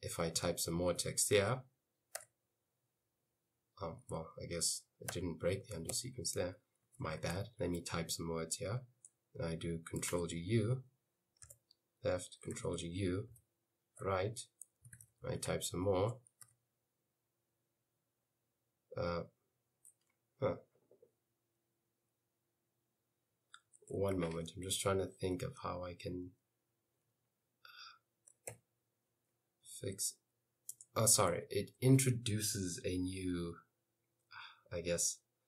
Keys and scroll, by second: 0.2-2.2 typing, 5.2-8.2 typing, 10.2 ctrl+g, 10.4 u, 11.5 Left, 12.6 ctrl+g, 12.8 u, 13.3 Right, 14.7-16.5 typing, 16.1 Escape, 23.8 u, 28.6 i, 29.7 s, 30.8 BackSpace.